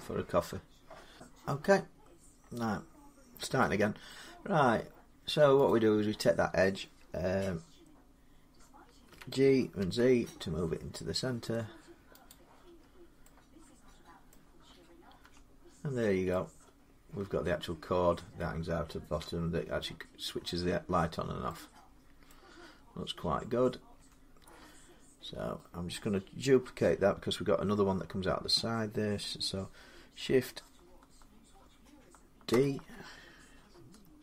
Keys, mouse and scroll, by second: 1.9-3.4 scroll up 2, 3.9 middle click, 5.5 click, 8.9-9.6 typing, 9.6 click, 12.1 click, 12.6-13.1 scroll up 6, 12.6 z, 14.1 middle click, 15.1 Tab, 15.8 scroll down 3, 19.6 middle click, 20.1 middle click, 20.2-20.9 scroll up 2, 22.1 middle click, 23.8 Tab, 24.7 middle click, 32.5 shift+d.